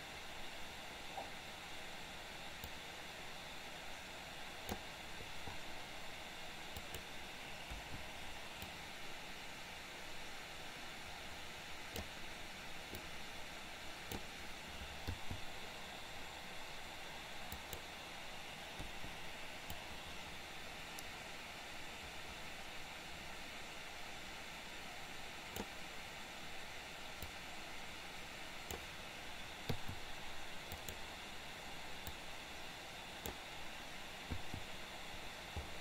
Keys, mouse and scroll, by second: 3.1-4.9 drag, 6.9 click, 7.9 Delete, 8.9-12.2 drag, 13.2-14.4 drag, 17.5 click, 18.9 Delete, 19.7-25.9 drag, 27.5-29.0 drag, 30.9 click, 32.0-33.6 drag.